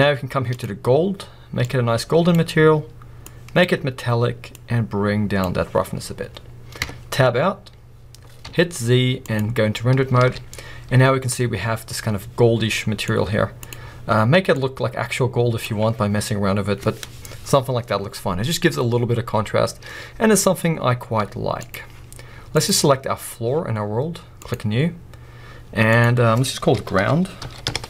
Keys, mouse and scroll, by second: 3.3-7.1 drag, 6.1-6.8 scroll down 2, 6.8 Tab, 7.4-7.7 scroll up 1, 9.4-14.6 drag, 9.4 scroll up 1, 9.5 z, 10.3 alt+a, 21.8 z, 22.6 click, 24.6-27.8 drag.